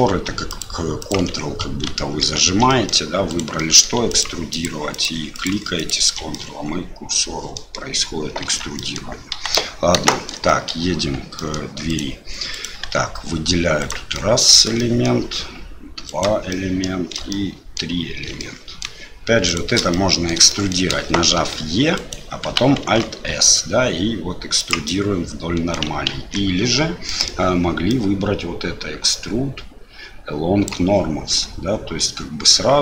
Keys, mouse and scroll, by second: 1.0 ctrl+click, 1.9 ctrl+z, 2.2 ctrl+z, 2.7 middle click, 3.3 click, 3.6 middle click, 4.1 ctrl+click, 5.3 ctrl+click, 6.3-7.6 middle drag, 8.4 Tab, 8.7 middle click, 9.3 Delete, 10.1 shift+middle click, 10.5 middle click, 11.3 middle click, 11.9 click, 12.5 click, 12.8 Tab, 13.8 click, 14.1 middle click, 14.8 shift+middle click, 16.1 shift+click, 16.5 shift+middle click, 17.3 middle click, 18.4 shift+middle click, 19.5 shift+click, 19.9 middle click, 20.5 shift+middle click, 21.4 e, 22.8 alt+s, 24.8 middle click, 26.1 ctrl+z, 27.1 middle click, 27.9-30.8 drag.